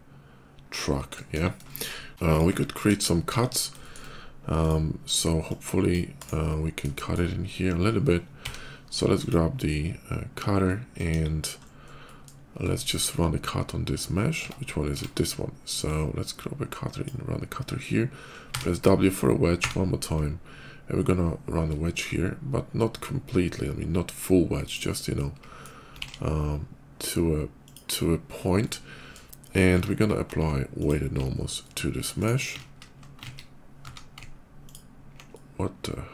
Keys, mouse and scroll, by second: 1.5 middle click, 1.5 shift+KP_5, 2.1 shift+click, 2.6 KP_5, 3.1 KP_5, 3.6 shift+middle click, 3.7 shift+middle click, 4.5 shift+click, 5.3 shift+click, 6.0 shift+right click, 6.8 middle click, 8.3 d, 8.8 click, 10.4 middle click, 10.9 KP_5, 11.4 middle click, 11.6 middle click, 11.8 middle click, 12.6 shift+middle click, 12.9 shift+middle click, 14.2 Tab, 14.8 Tab, 15.6-16.9 drag, 18.4 w, 20.2 ctrl+w, 24.5 click, 25.0 middle click, 25.8 alt+x, 27.5 click, 28.2 middle click, 28.5 middle click, 29.6 q, 30.5 alt+click, 31.5 alt+middle click, 32.0 alt+right click, 32.4 ctrl+z, 33.0 ctrl+z, 33.6 q, 34.5 alt+click, 35.2 alt+middle click.